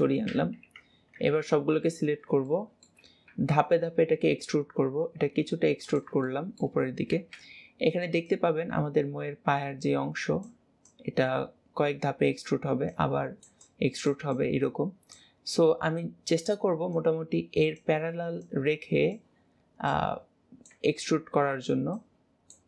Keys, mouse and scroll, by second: 0.5 KP_3, 1.2 a, 1.7 scroll down 2, 2.5 shift+middle click.